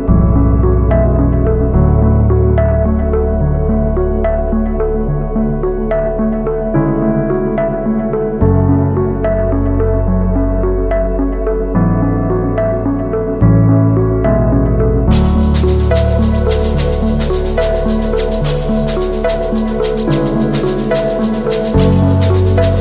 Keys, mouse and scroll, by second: 1.6-2.5 typing, 10.1 right click, 10.7 double click, 15.2 double click, 18.6 ctrl+-, 18.8 ctrl+-, 18.9 ctrl+-, 19.1 ctrl+-, 19.4 ctrl+-, 19.5 ctrl+-, 20.0 ctrl+-, 20.5 ctrl+-, 20.8 ctrl+=.